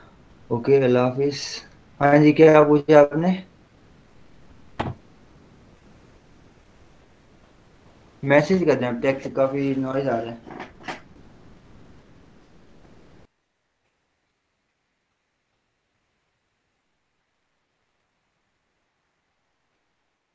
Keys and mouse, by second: 2.0-6.5 drag.